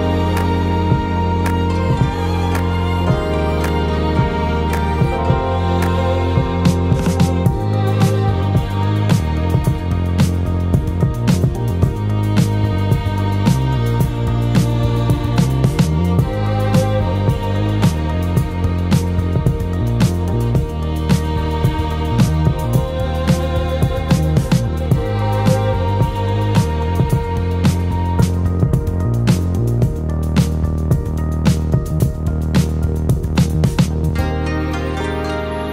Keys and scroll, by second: 10.0 ctrl+space, 10.5 ctrl+space, 20.5 ctrl+t.